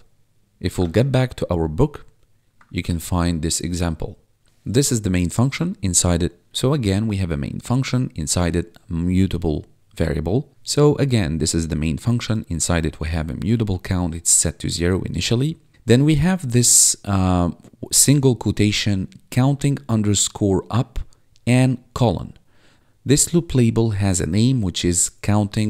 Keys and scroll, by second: 0.4 Tab, 0.9 Tab, 2.7 1.